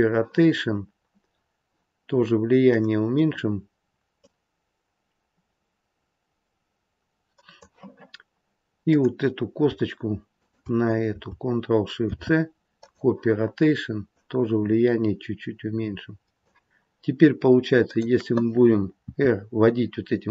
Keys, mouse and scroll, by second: 1.2-1.6 scroll down 4, 1.6-2.6 scroll down 2, 2.6 click, 2.6-4.1 scroll down 2, 4.1 click, 8.7 click, 10.3 shift+click, 11.9 ctrl+shift+c, 14.0 click, 17.7 click, 19.0 r.